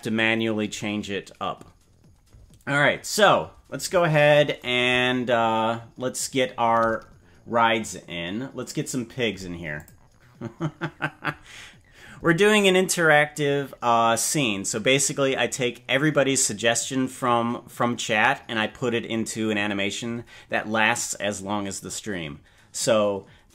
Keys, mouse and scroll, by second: 3.5-4.1 scroll down 8, 4.9-6.9 scroll down 2, 9.8 click.